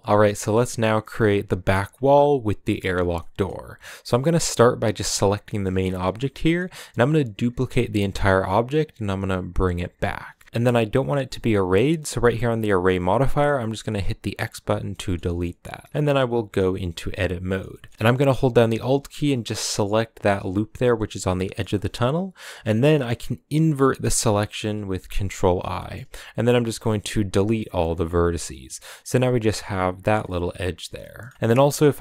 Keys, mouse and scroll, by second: 0.0-2.6 shift+middle drag, 2.6-3.7 scroll down 8, 2.9-3.2 middle drag, 3.7-4.7 middle drag, 4.7 right click, 5.3-5.9 scroll down 3, 5.9-6.7 shift+middle drag, 6.7-7.5 scroll up 1, 7.5 shift+d, 10.4-14.2 middle drag, 14.2 click, 14.7 middle click, 15.4-16.0 scroll up 3, 16.0 Tab, 16.7-17.7 middle drag, 17.7-19.1 scroll up 2, 17.9 middle click, 19.1-19.9 scroll up 1, 19.9-21.1 alt+right drag, 21.1-24.0 middle drag, 24.0 ctrl+i, 25.5 scroll up 1, 25.5 middle click, 25.8 x, 28.1 scroll down 2, 28.3 middle click, 28.8 a, 30.0-31.7 middle drag, 31.7 scroll up 2.